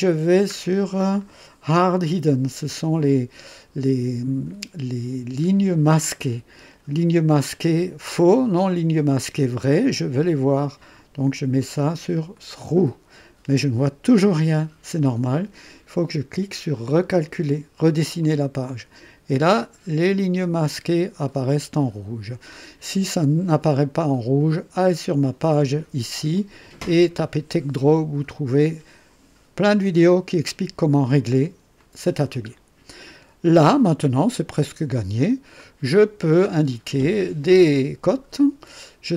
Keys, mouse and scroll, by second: 0.8 scroll down 1, 10.8 click, 11.5 click, 12.3 click, 18.2 click, 19.6 scroll up 1, 26.3 click, 31.7 click, 35.6 middle click.